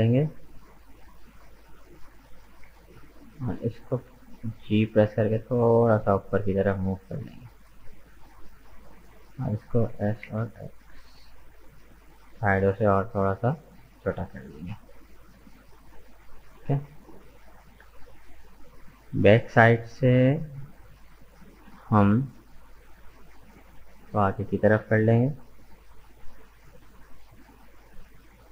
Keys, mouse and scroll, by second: 2.2 alt+right click, 2.8-4.0 middle drag, 4.0 g, 9.9 s, 15.2-18.1 middle drag, 18.1-20.6 drag, 20.6 right click, 21.3 shift+right click, 21.6-23.6 middle drag, 23.6 g, 26.4-27.9 middle drag, 27.9 right click.